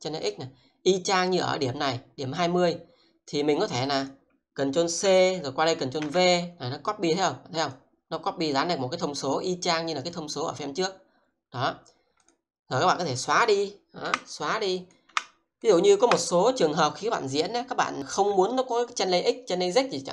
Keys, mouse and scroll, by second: 3.1 double click, 3.9 click, 4.7 ctrl+c, 6.0 ctrl+v, 7.6 click, 14.1 Delete, 14.8 click, 15.2 Delete, 15.6 click, 16.0 Delete.